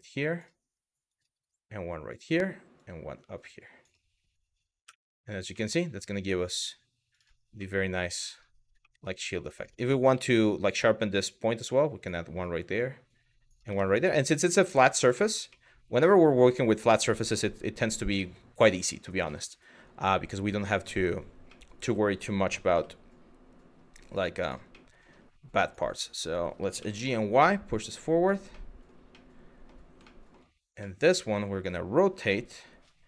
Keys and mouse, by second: 0.7 click, 2.4 click, 4.5 Tab, 5.3 middle click, 6.7 click, 7.3-7.6 middle drag, 8.5 middle drag, 9.1 click, 9.3 Tab, 9.8 middle click, 10.6 click, 12.0 click, 13.4 Tab, 14.5 middle click, 15.3-17.7 middle drag, 20.4 click, 21.1-21.6 middle drag, 22.1 g, 22.4 y, 24.3-24.6 middle drag, 26.4 g, 26.7 y, 27.9 click, 28.2-28.5 middle drag, 28.9-29.3 middle drag, 29.7 shift+middle drag, 30.6-31.1 middle drag, 31.8 r, 32.9 x.